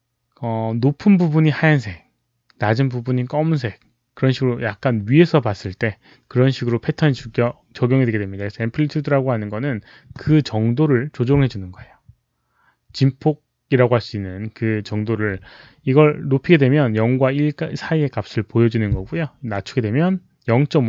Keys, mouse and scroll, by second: 19.4-20.8 drag.